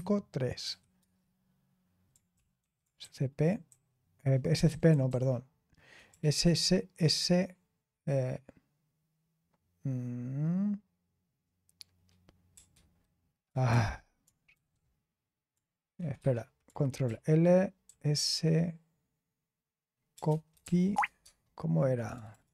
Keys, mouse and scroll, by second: 0.0-0.9 typing, 2.3-4.1 typing, 2.5 Return, 5.8-6.7 typing, 12.5 BackSpace, 13.6 ctrl+c, 14.5 ctrl+r, 15.9 Escape, 16.1 Escape, 17.0 ctrl+l, 17.8 s, 19.8-21.1 typing, 22.1 Tab, 22.2 BackSpace.